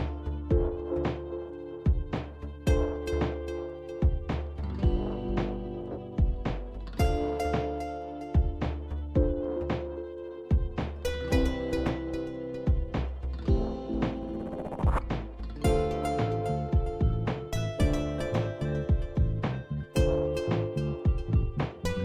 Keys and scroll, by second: 9.7 alt+Tab, 12.8 a, 14.1 typing, 17.5-21.4 typing.